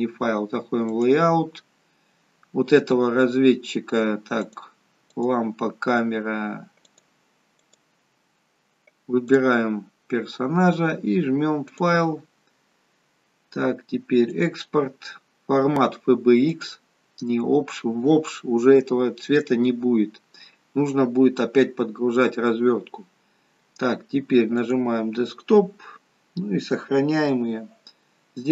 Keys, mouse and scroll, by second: 1.0 click, 5.0 click, 7.6 click, 9.2 click, 11.6 click.